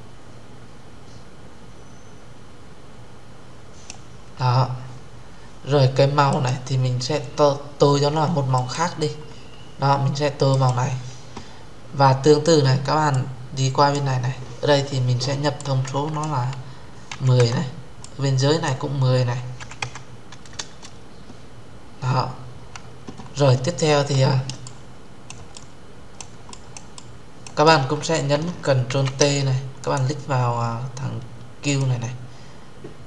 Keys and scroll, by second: 20.3 Return, 28.6 ctrl+t.